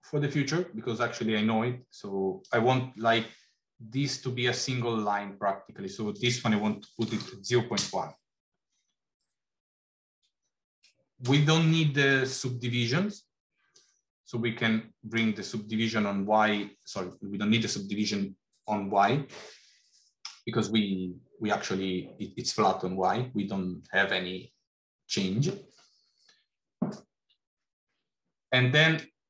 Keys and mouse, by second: 2.3-5.8 drag, 5.9-9.0 drag, 13.5-15.0 drag, 28.8-29.2 drag.